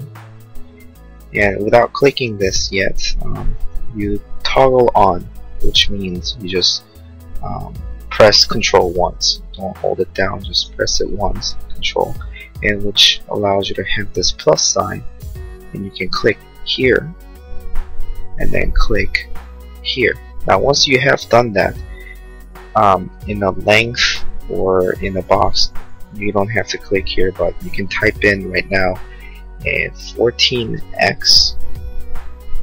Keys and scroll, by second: 30.5 1, 30.8 4, 31.6 x.